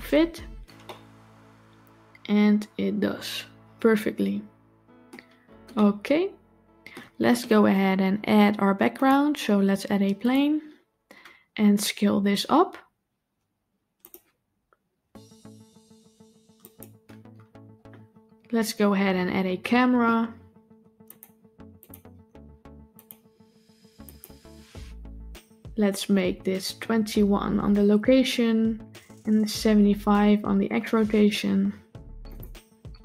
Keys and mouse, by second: 0.7-4.9 middle drag, 5.6-6.8 middle drag, 8.9-10.2 drag, 14.4 s, 18.8 n, 21.0 click, 22.8 click, 23.9-32.2 drag, 32.9-33.0 shift+middle drag.